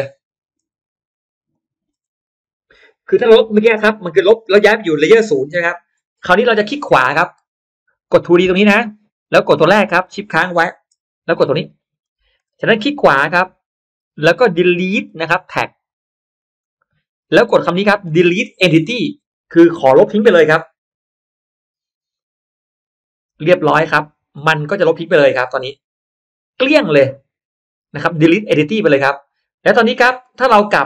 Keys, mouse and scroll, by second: 0.0 click, 1.4 shift+click, 8.3 click, 9.5 click, 11.8 shift+click, 13.7 right click, 16.5 click, 18.3 click, 22.1 click, 24.3 click, 24.7 click, 28.0 click.